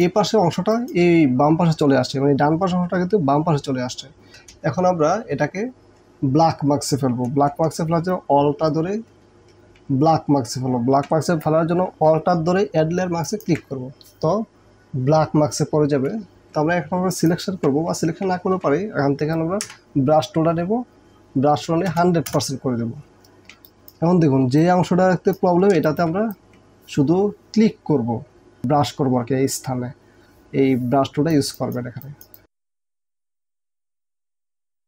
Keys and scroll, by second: 0.6 ctrl+space, 4.3 space, 18.5 ctrl+d, 19.7 b, 21.9 KP_0, 23.6 space, 33.0 space, 34.1 space.